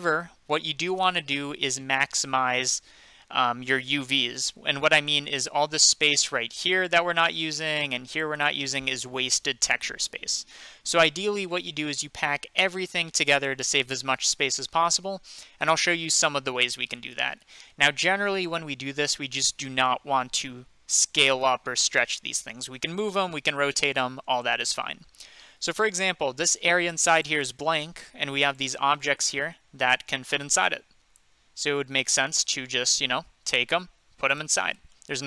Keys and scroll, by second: 32.9 g.